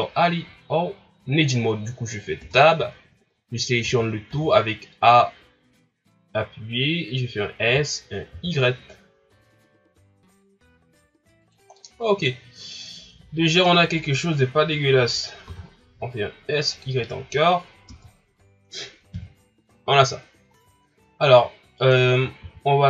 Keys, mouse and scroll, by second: 2.4 Tab, 3.8 a, 4.3 a, 7.6 s, 11.8-14.8 middle drag, 15.5 s, 17.0 middle click, 17.9 Tab, 19.1 KP_1, 19.9-20.6 scroll up 2, 20.6 scroll down 3, 21.1-21.7 ctrl+scroll up 1, 21.7 scroll up 1, 22.4 s.